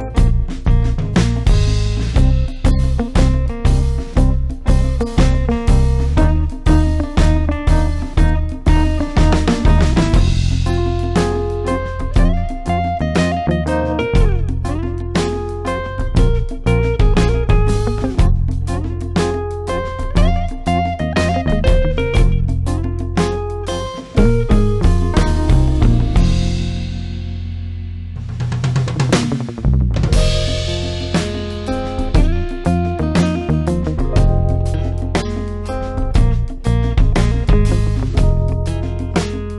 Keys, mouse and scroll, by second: 4.4-5.0 drag, 7.8 click, 15.6-23.7 drag, 16.9-17.2 click, 23.7-24.5 drag, 30.4 ctrl+Num_Lock, 30.4 click, 30.5 ctrl+space, 30.7 ctrl+click, 31.0-31.7 ctrl+space, 31.9 click, 32.1-32.5 space, 32.9 click, 36.2 click.